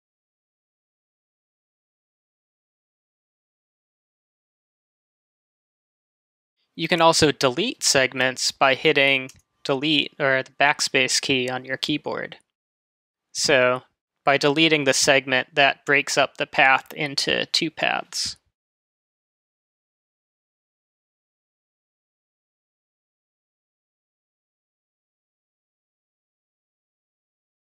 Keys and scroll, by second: 9.3 BackSpace.